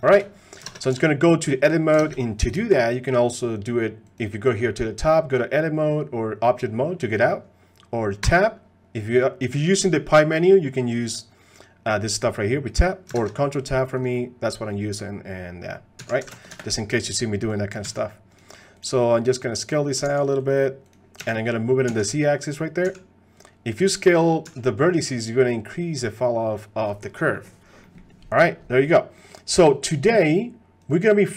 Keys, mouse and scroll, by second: 0.8 ctrl+Tab, 0.9 a, 2.1 ctrl+Tab, 4.1-6.8 drag, 8.2 Tab, 13.3 ctrl+Tab, 16.0 s, 17.5 click, 17.8 s, 18.8 click, 19.0 middle click, 19.5 middle click, 21.2 s, 21.2 g, 22.8 s, 23.8 click, 24.4 s, 27.3 middle click, 27.8 middle click, 28.8 middle click, 29.2 middle click, 30.9-31.3 drag.